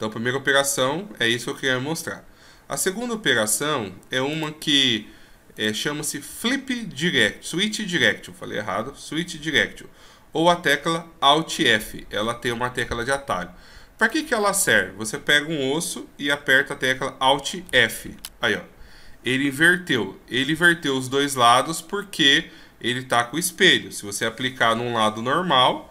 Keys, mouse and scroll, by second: 4.3 right click, 5.5 right click, 6.4 w, 14.0 right click, 17.6 alt+f, 24.2 ctrl+z.